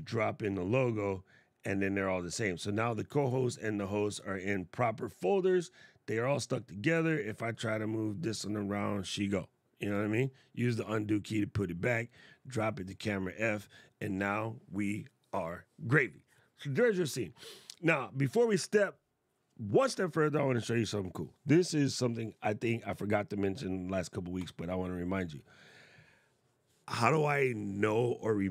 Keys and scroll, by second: 9.6 super+z.